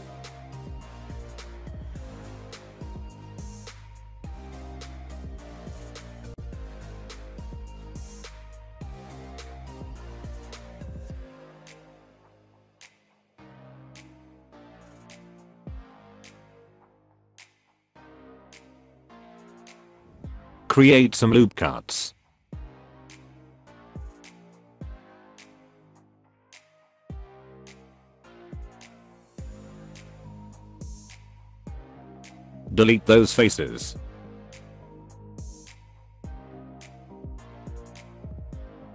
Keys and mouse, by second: 0.0 shift+middle drag, 6.5 s, 9.9 click, 11.1 g, 12.8 Tab, 12.8 s, 14.1 s, 16.4 Tab, 16.6 click, 16.7 Tab, 17.2 Tab, 17.4 Tab, 17.5 alt+click, 17.8 s, 18.6 g, 19.4 alt+click, 19.7 Tab, 19.9 middle click, 20.8 Tab, 21.1 Tab, 21.3 click, 21.4 Tab, 21.8 ctrl+r, 23.2 alt+middle click, 23.9 s, 26.9 ctrl+r, 28.2 s, 30.4 Tab, 30.6 middle click, 30.9 Tab, 31.6 click, 32.6 middle click, 33.1 middle click, 33.2 click, 33.8 click, 34.2 click, 34.6 x, 35.1 click, 36.2 shift+middle click, 36.7 click, 37.6 shift+click, 37.9 f, 38.1 shift+middle click.